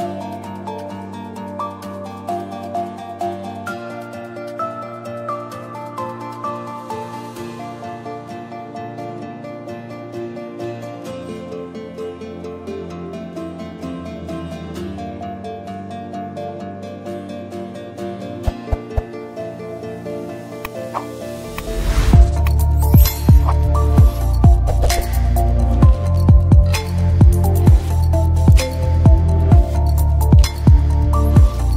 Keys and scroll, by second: 7.1-8.5 typing, 16.2-17.5 typing, 20.8 a, 20.8 BackSpace, 26.9-27.9 typing, 30.6-31.5 typing.